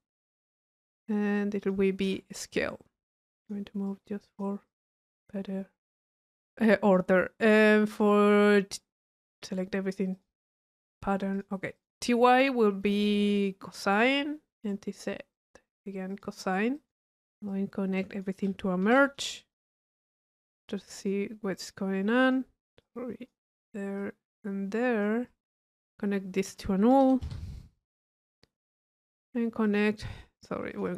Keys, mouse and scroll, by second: 1.3-1.7 drag, 3.1 click, 3.9-5.2 drag, 6.8 click, 7.9 click, 9.1 right click, 10.1-11.1 drag, 13.3 click, 14.0 click, 14.6 click, 15.3 click, 16.1 click, 17.5 click, 19.5-20.0 drag, 20.6-21.1 drag, 21.5 click, 22.8 click, 24.0-25.6 drag, 26.1-26.6 drag, 27.0 u, 28.0 click, 28.6 click, 29.6 click, 30.1 click.